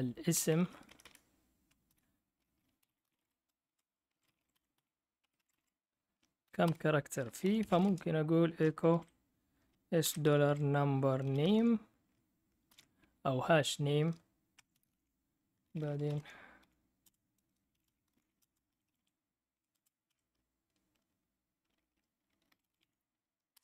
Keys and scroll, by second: 0.0-20.6 typing, 6.6 Return, 22.2-23.6 typing.